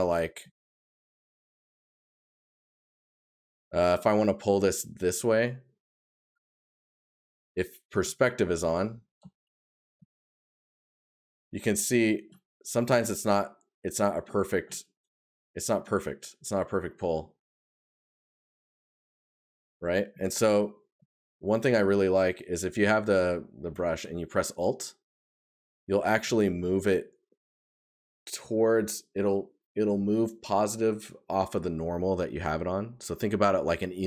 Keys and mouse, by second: 8.8 right click, 11.6 right click, 14.7 right click, 16.3 right click, 19.8 right click, 26.5 right click.